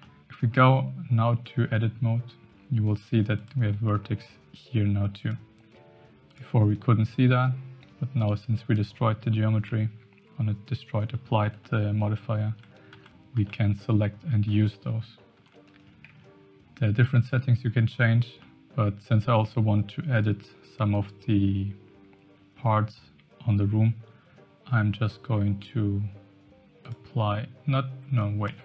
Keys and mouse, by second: 0.0 middle click, 3.3 click, 3.9 shift+middle click, 6.2 click, 8.2 click, 9.7 Tab, 12.0 ctrl+z, 12.7-15.8 ctrl+z, 16.1 Tab, 18.4 middle click, 20.6 Tab, 21.0 click, 26.9-28.1 drag.